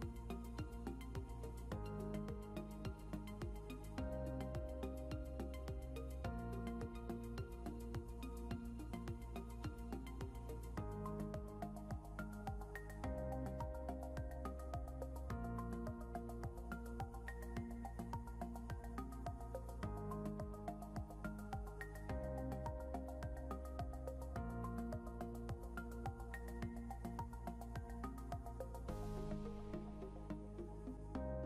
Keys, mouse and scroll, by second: 2.0 ctrl+Home, 4.5 ctrl+Home, 7.5 |, 9.0 shift+click, 9.9 e, 15.0 ctrl+click, 17.4 e, 19.3 scroll, 19.4 scroll down 1, 21.0 scroll up 1, 23.4 ctrl+g, 24.7 c, 30.3 double click.